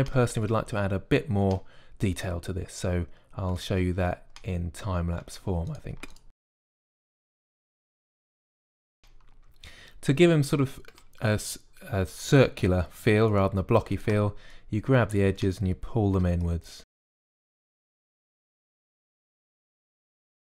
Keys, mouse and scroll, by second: 2.5-4.3 middle drag, 4.6-7.8 middle drag, 7.8 click, 8.0 middle click, 8.3 click, 8.3 s, 8.7-9.7 drag, 16.3 middle click, 17.3 middle click, 19.4 click, 19.7-20.5 typing, 20.0 ctrl+r.